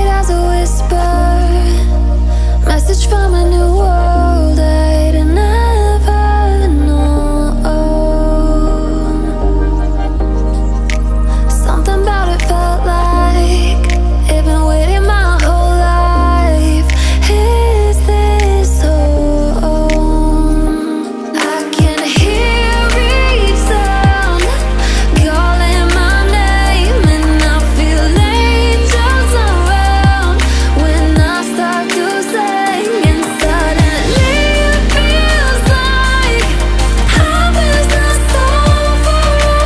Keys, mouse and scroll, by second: 1.0-1.5 alt+scroll up 1, 1.7 click, 3.5 Up, 5.0 Down, 7.4-7.7 alt+scroll down 1, 8.0 click, 8.6-9.5 alt+scroll up 2, 9.5-10.0 alt+scroll down 2, 10.0 click, 12.5-13.2 alt+scroll up 2, 13.2-13.6 alt+scroll down 2, 13.6-13.9 alt+scroll up 2, 14.0 click, 16.8 click, 17.4-17.8 alt+scroll down 1, 17.8 alt+scroll up 1, 19.4-25.1 drag, 25.1 alt+scroll down 1, 25.8 alt+scroll up 1, 27.0 click, 27.5 alt+scroll up 1, 28.3-32.4 drag, 29.6-32.4 shift+drag, 32.4 alt+scroll down 1, 33.4 click, 34.4 alt+scroll up 1, 35.1 click, 36.5 click.